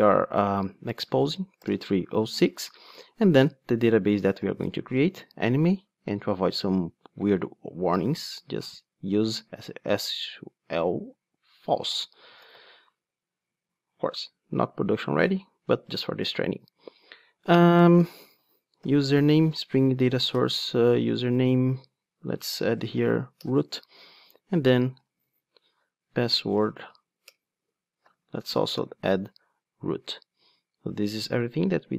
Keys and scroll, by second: 20.3 Return, 27.3 Return, 29.7 Return.